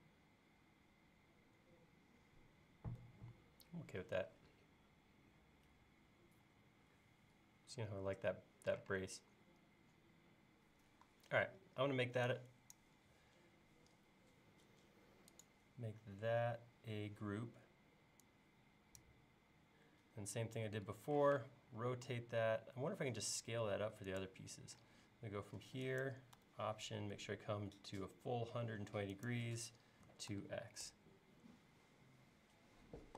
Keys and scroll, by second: 8.9 space, 21.2 q, 29.8-30.8 typing.